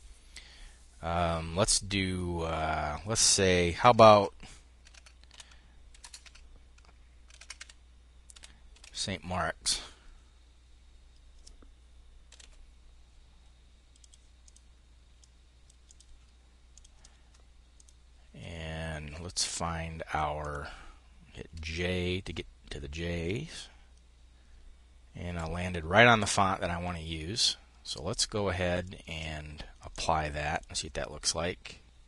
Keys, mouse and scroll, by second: 3.2 Caps_Lock, 4.2 s, 4.3 Caps_Lock, 4.8 t, 5.4 ., 5.4 space, 5.6 Caps_Lock, 6.0 click, 6.8-8.7 typing, 6.8 Caps_Lock, 7.3 click, 11.5-12.3 typing, 13.4-15.6 drag, 16.1 click, 17.2-18.9 drag, 19.8 click, 21.0 j, 24.7 Escape, 28.2 click, 28.4 click, 28.6-30.4 drag.